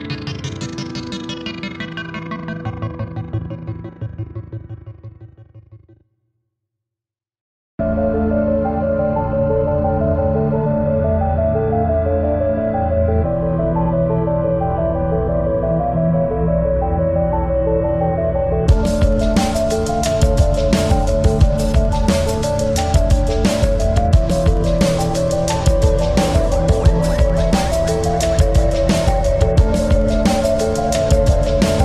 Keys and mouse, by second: 1.2 click, 1.2 typing, 4.7-5.3 typing, 5.0 click, 6.4 space, 6.7 click, 8.2 click, 8.2 typing, 9.4 space, 9.5 click, 9.8 space, 10.8 click, 12.4-14.8 typing, 12.8 click, 13.3 click, 13.9 click, 16.8 click, 16.8 typing, 18.0-20.8 drag, 18.0 typing, 19.6 click, 24.2 click, 24.4 click, 25.3-27.8 typing, 25.5 click, 27.6 click, 28.3 click, 28.9-31.1 alt+drag, 31.1-31.8 typing, 31.3 click.